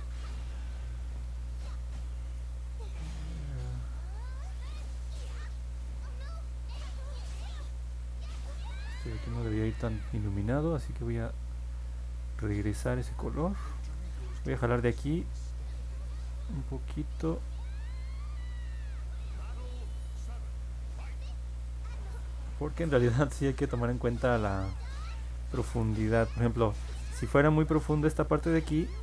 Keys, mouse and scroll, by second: 0.6 click, 1.7 click, 10.6 click, 11.3 click, 12.3 click, 13.6 ctrl+z, 15.1 click, 15.8 click, 16.5 click, 17.4 click, 18.0 click, 18.8 click, 19.3 click, 19.6 click, 20.8 click, 22.2 ctrl+z, 23.2 click, 24.7 click, 25.9 ctrl+z, 27.0-29.0 drag.